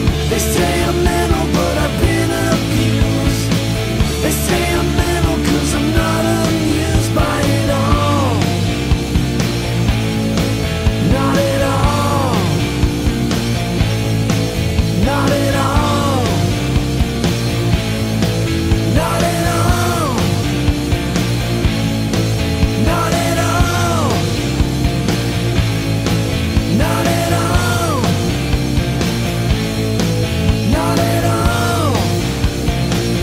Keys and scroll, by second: 3.7-5.2 typing, 9.4 scroll, 10.8-11.3 scroll.